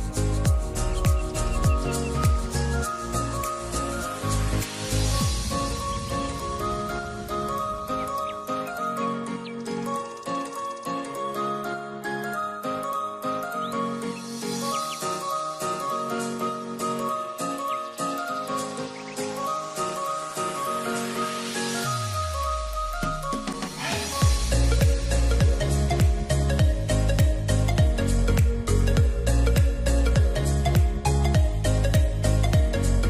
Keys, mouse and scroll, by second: 4.3 shift+click, 7.3 middle click, 10.0 double click, 27.6 middle click.